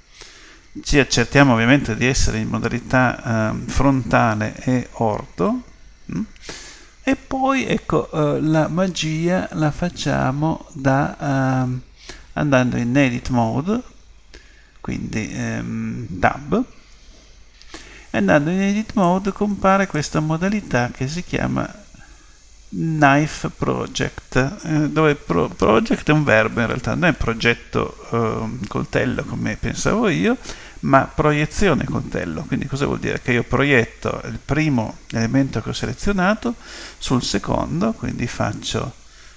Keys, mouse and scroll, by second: 16.8 Tab, 19.0 click.